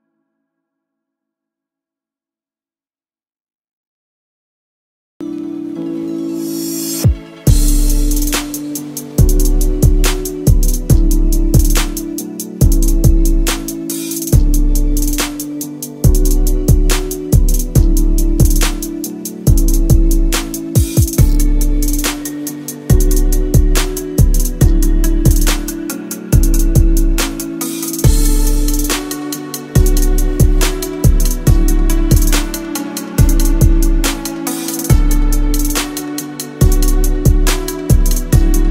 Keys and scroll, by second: 14.8 KP_1, 14.8 KP_0, 14.9 KP_0, 15.1 Return.